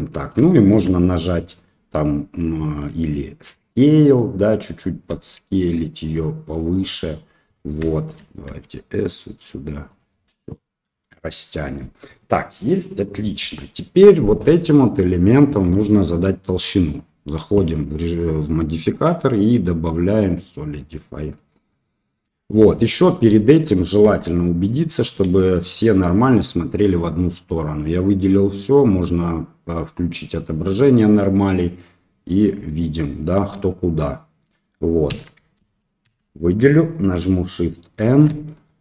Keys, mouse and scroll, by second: 0.4 shift+middle click, 5.0 s, 7.8 shift+middle click, 8.4 s, 10.5 middle click, 11.2 middle click, 12.2 middle click, 13.4 Tab, 14.2 click, 18.9-20.3 drag, 20.7 middle click, 21.6-22.1 middle drag, 22.3 middle drag, 23.3 shift+middle drag, 24.0 Tab, 25.2 a, 28.4-30.4 drag, 30.5-33.4 middle drag, 33.4 click, 34.0 middle click, 35.1 a, 36.0 a, 38.0 shift+n, 38.6-38.8 middle drag.